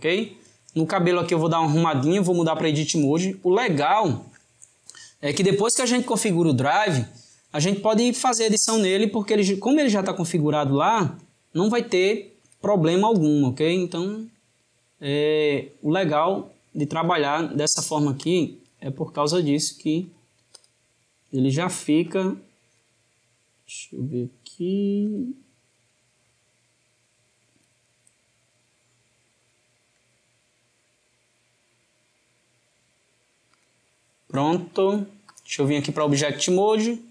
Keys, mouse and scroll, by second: 0.8 click, 2.5-5.6 drag, 8.0 click, 13.1 click, 13.7 click, 14.1 g, 17.0 click, 17.5 click, 19.1 g, 20.5 click, 22.0 click, 25.0 click, 25.7 g, 29.4 click, 34.7-37.1 drag.